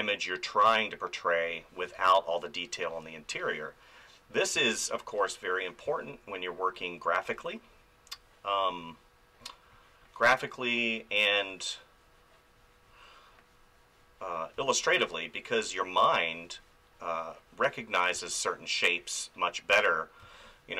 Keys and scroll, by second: 1.8 space, 4.5 space, 14.5 space, 18.1 space, 20.2 space.